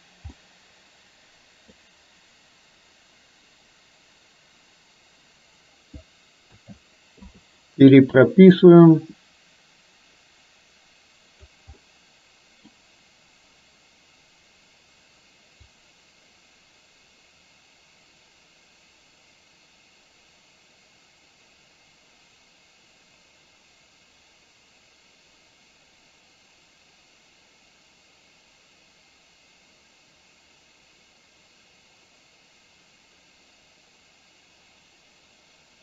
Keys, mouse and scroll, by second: 0.4-1.8 middle drag, 6.6 a, 7.3 i, 8.7-11.6 drag, 11.9-12.7 middle drag, 15.8-35.8 drag.